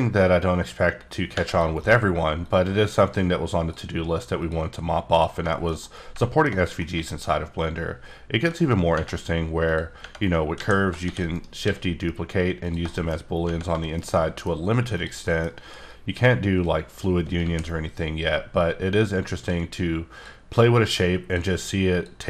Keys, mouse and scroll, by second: 0.4 click, 1.8 double click, 2.4 click, 4.4 click, 5.5 shift+middle click, 6.6 scroll down 1, 6.8 middle click, 8.8 scroll up 1, 9.6 click, 10.5 a, 11.0 shift+d, 11.3 right click, 11.6 s, 12.6 click, 12.8 shift+middle click, 13.7 shift+middle click, 14.9 click, 15.2 middle click, 15.8 click, 17.4 g, 19.4 s, 21.0 click, 21.9 click.